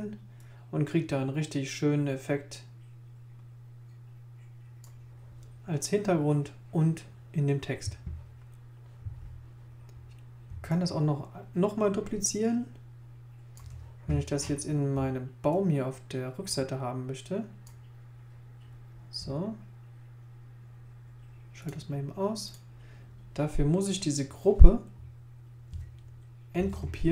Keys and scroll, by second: 26.6 shift+super+g.